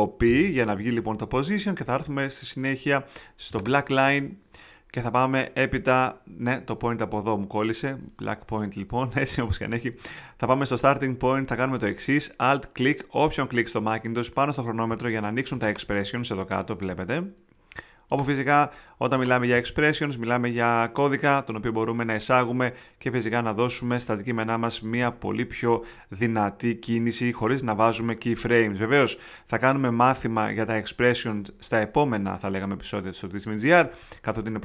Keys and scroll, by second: 0.2 π.